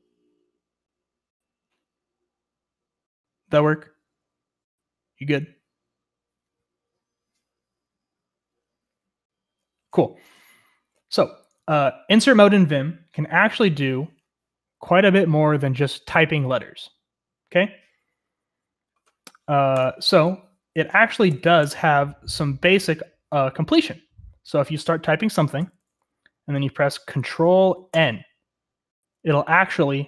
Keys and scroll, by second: 21.2-21.6 typing, 25.2 typing, 27.9 ctrl+n.